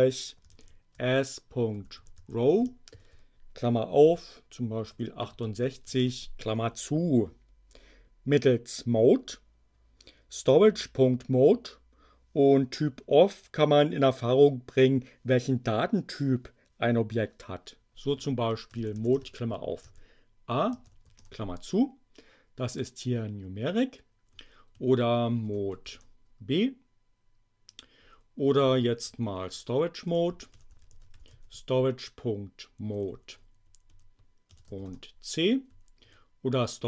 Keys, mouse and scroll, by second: 0.2-2.8 typing, 4.6-5.6 typing, 6.0 shift+Return, 18.2-20.8 typing, 21.1 shift+Return, 24.3 Up, 24.7 Left, 25.4 BackSpace, 25.6 b, 25.9 Return, 28.0 Up, 28.4 Left, 29.7-31.8 typing, 33.0 Right, 34.4 Delete, 34.6 c, 34.8 Return, 35.7 Up, 36.0 Left.